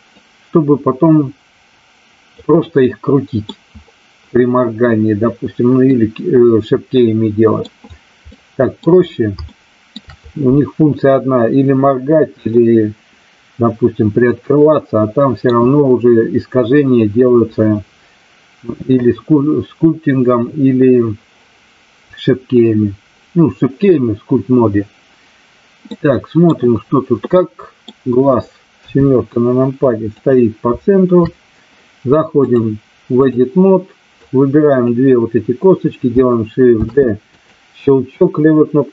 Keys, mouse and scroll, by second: 0.1-2.3 drag, 2.7-3.5 middle drag, 5.9-7.6 middle drag, 8.3-8.7 middle drag, 9.5-9.9 shift+middle drag, 12.5-15.5 middle drag, 25.9-26.5 middle drag, 27.4-27.9 middle drag, 28.7 KP_7, 30.1 click, 32.4-33.4 drag, 34.3 click, 36.7 shift+d, 37.3 click.